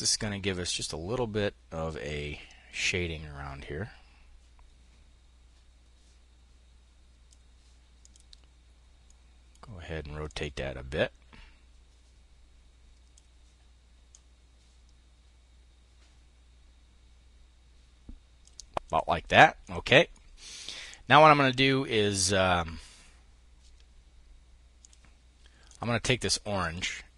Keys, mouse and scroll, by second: 7.4-9.7 drag, 19.7 click, 25.1 click, 26.0 click.